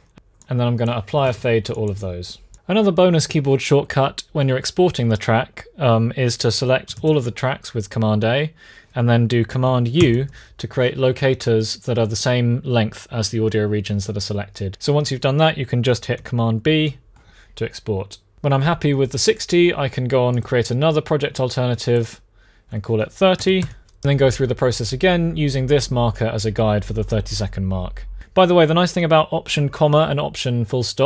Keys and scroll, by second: 0.7-1.5 typing, 6.7 super+a, 9.7 super+u, 16.4 super+b, 22.9-23.8 typing.